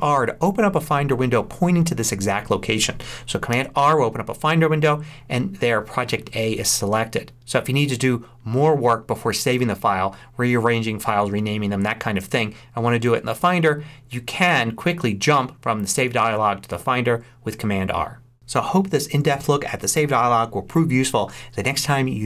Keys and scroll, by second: 3.4 super+r.